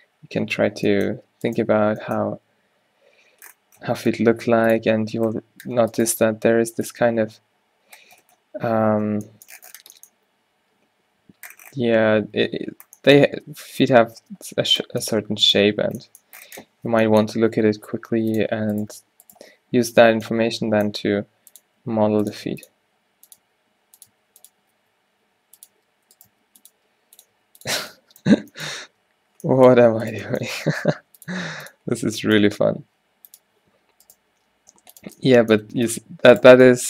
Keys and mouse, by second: 1.2 g, 1.9 o, 2.4 g, 4.9 r, 6.2 q, 6.6 g, 7.1 Tab, 13.4 Tab, 14.3 Tab, 16.8 Tab, 18.8 right click, 20.2-24.9 typing, 26.0 g, 26.3 s, 26.9 g, 27.6 s, 28.4 Tab, 28.9 Tab, 30.6 g, 31.4 g, 33.4-36.0 drag, 34.1 right click, 34.4 g, 35.5 middle click, 35.6 r, 36.6 click.